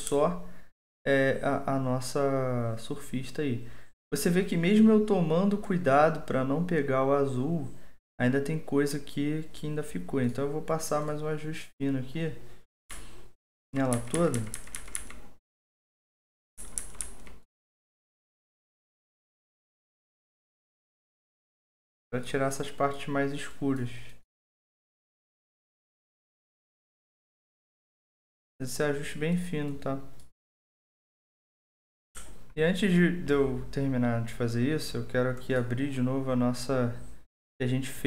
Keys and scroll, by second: 12.9-15.1 typing, 16.4-17.2 typing.